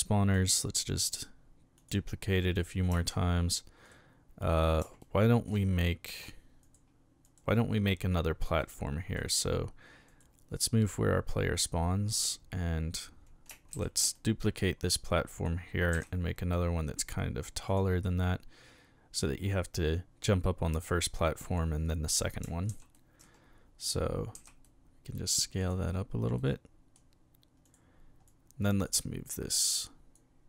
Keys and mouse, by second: 0.0-0.3 middle drag, 1.8 click, 3.8 right click, 5.0-5.4 shift+middle drag, 6.6 right click, 7.2 right click, 8.6-9.1 middle drag, 10.1 right click, 10.7-11.6 drag, 12.1 right click, 13.7 shift+d, 14.1-14.6 middle drag, 15.3 click, 15.9 s, 16.0-16.5 middle drag, 17.7 click, 18.0-19.2 middle drag, 22.7 shift+s, 22.9 shift+middle click, 24.3 s, 24.6 middle click, 25.6 click, 26.4-26.9 middle drag, 27.7 right click, 28.3-28.8 drag, 29.3-30.1 drag.